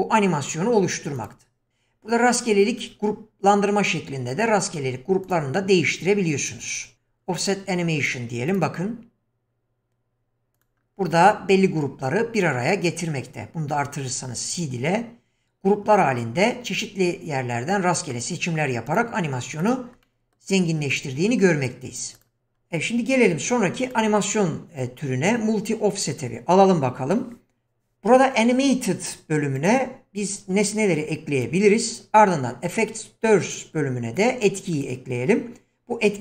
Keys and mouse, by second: 0.1 click, 1.1 click, 4.6 click, 5.2 click, 8.0 click, 8.5 click, 10.6 click, 19.7 click, 20.0-20.4 middle drag, 20.9-21.3 middle drag, 22.1 click, 24.0-26.2 drag, 29.5-31.4 drag, 32.8-34.8 drag.